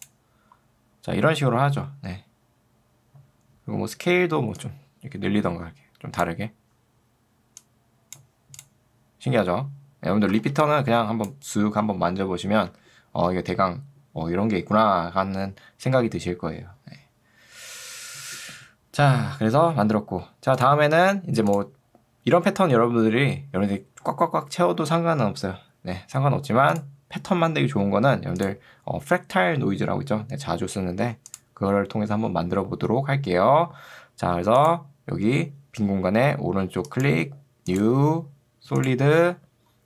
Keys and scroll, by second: 10.5 ctrl+2, 12.7 Escape.